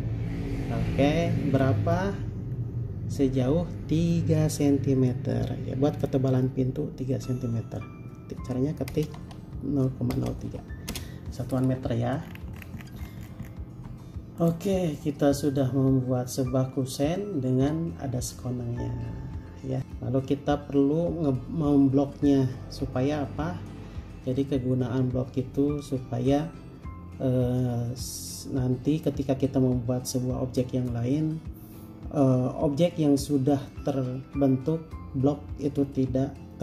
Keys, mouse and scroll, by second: 2.1-3.3 scroll down 1, 9.1-10.7 typing, 11.1 Return, 12.4 scroll down 1, 14.0 space, 15.2 middle click, 19.8-20.3 scroll up 1.